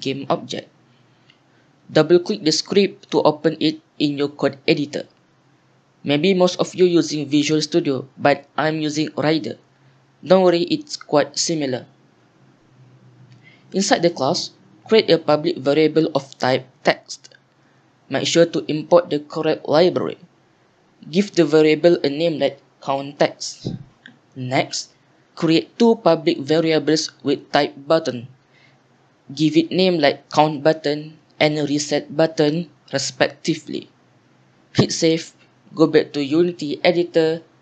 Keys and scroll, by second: 4.8 Return, 5.0 shift+Home, 5.0 BackSpace, 8.3 BackSpace, 8.8 BackSpace, 10.3 ctrl+z, 11.4 BackSpace, 16.1-19.8 typing, 21.2 Tab, 23.4-29.9 typing, 31.0-34.2 typing.